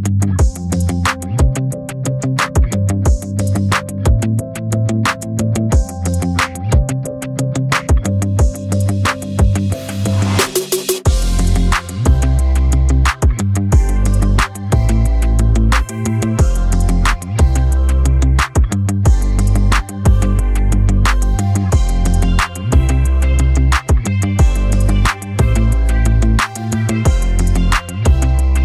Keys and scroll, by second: 4.2 Escape, 16.0 Escape, 22.0 Escape.